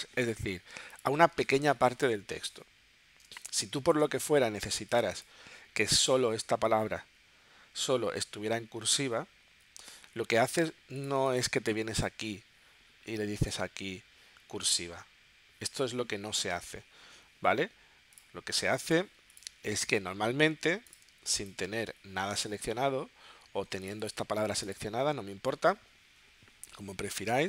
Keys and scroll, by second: 3.3 space, 21.1 space.